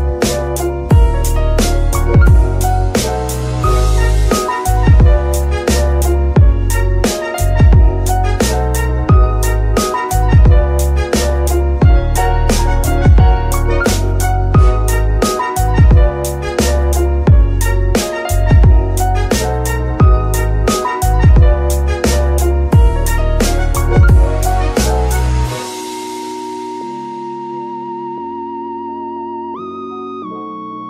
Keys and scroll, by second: 10.5 Escape, 11.2 r, 12.2 r, 12.4 x, 13.1 Escape, 15.6 x, 16.5 Escape, 17.3 Escape, 20.0 shift+a, 24.6 Return, 25.8 typing.